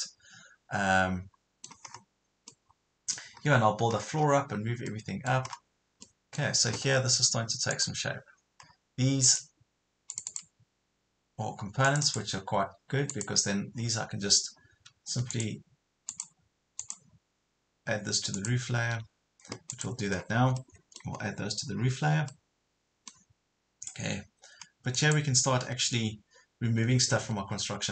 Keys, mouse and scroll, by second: 1.9 scroll up 1, 2.5 middle click, 3.3-3.9 scroll up 1, 3.9 scroll down 1, 4.9 middle click, 5.5 scroll up 1, 6.1 middle click, 7.7 click, 8.7-9.3 scroll down 1, 9.3 click, 15.3 ctrl+click, 16.1 ctrl+click, 16.8 ctrl+click, 18.3 ctrl+click, 19.7 click, 20.1 scroll down 1, 20.6 middle click, 21.2 scroll up 1, 21.8 scroll down 1, 22.3-23.5 middle drag, 24.9 click, 27.0 Escape.